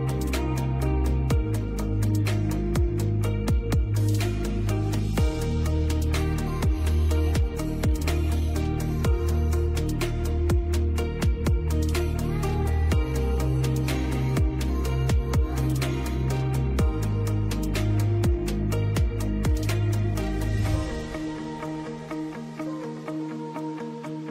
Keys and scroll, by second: 6.8 Escape, 12.9 space.